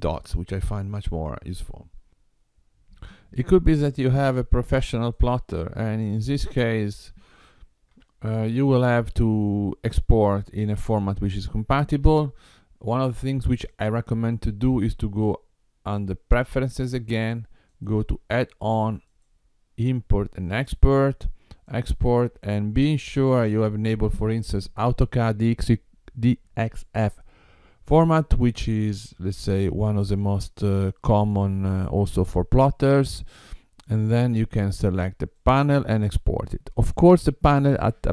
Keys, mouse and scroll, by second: 4.9 click, 6.3 click, 7.9 Tab, 9.4 click, 13.7 click, 35.5 click.